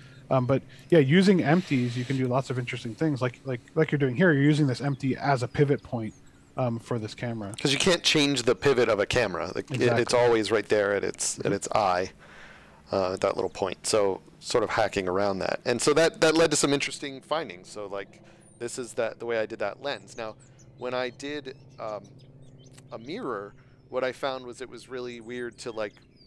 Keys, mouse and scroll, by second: 0.4 x, 0.8 click, 2.1 right click, 2.6 middle click, 14.9 right click, 15.3 middle click.